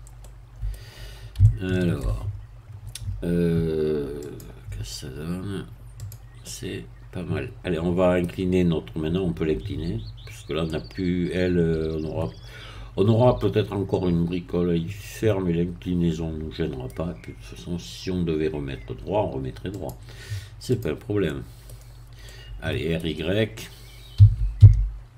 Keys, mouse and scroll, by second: 0.2 middle click, 1.4 shift+middle click, 4.2 click, 5.2-6.0 scroll up 1, 6.0 click, 6.4-8.6 middle drag, 10.7-17.1 middle drag, 19.7-21.0 drag, 21.3 middle click, 21.8 scroll down 1, 22.3-24.1 middle drag, 24.1 r, 24.6 y.